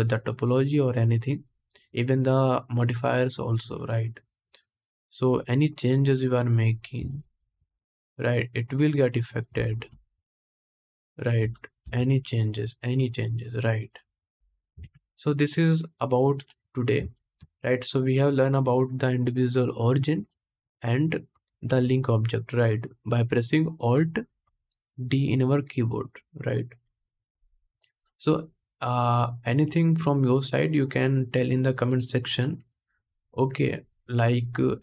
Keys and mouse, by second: 5.6-7.7 drag, 7.2 3, 7.7 middle click, 8.4-10.4 drag, 9.6 s, 10.4-17.8 middle drag, 11.5 g, 14.4 ctrl+click, 14.5 ctrl+Tab, 16.6 click, 16.7 shift+drag, 17.8-34.8 drag.